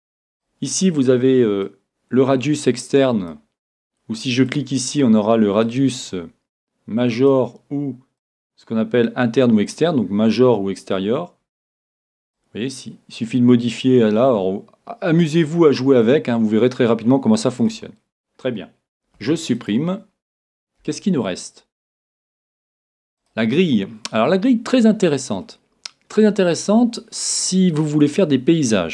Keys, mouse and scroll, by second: 0.4-3.4 drag, 4.5-7.5 drag, 8.2-10.0 drag, 11.4-13.4 middle drag, 12.4-14.3 drag, 19.2 x, 20.8 shift+a, 23.8-27.3 middle drag, 26.1-27.1 scroll up 1, 27.1-27.5 scroll up 1, 28.8 middle click.